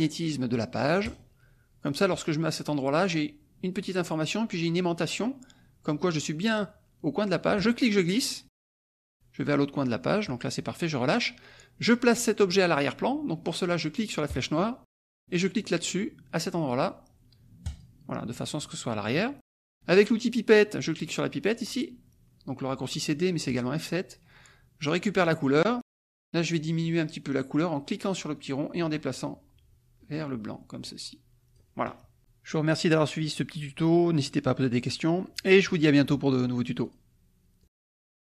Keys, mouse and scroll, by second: 1.0 click, 7.6-10.4 drag, 14.3 click, 17.6 click, 23.5 click, 25.2 click, 26.4 click, 29.7-33.1 drag, 34.2 click, 35.8 click, 36.4 click, 37.2 click, 38.0 click.